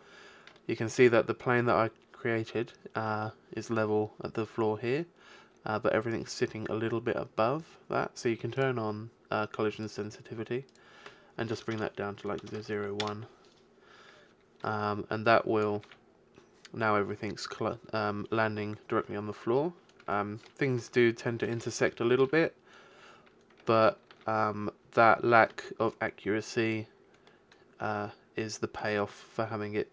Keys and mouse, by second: 8.6-11.7 drag, 11.7 BackSpace, 12.5 KP_0, 15.3 click, 15.9 alt+a, 20.3-21.5 middle drag, 24.0 alt+a, 27.5-28.9 middle drag.